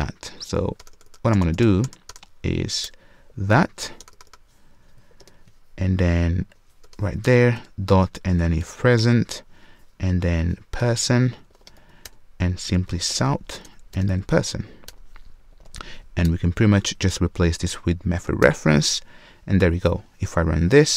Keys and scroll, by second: 0.8 alt+BackSpace, 8.6 alt+super+l, 8.9 Return, 9.0 ctrl+space, 20.6 shift+F10.